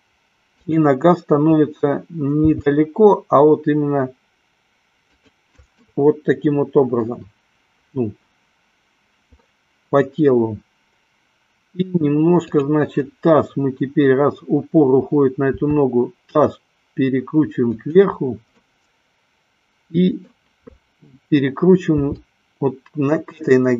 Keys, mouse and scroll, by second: 3.0 g, 5.5 click, 6.2-7.3 middle drag, 12.5 click, 15.5 r, 18.0 click, 18.8-20.7 middle drag, 22.2 r.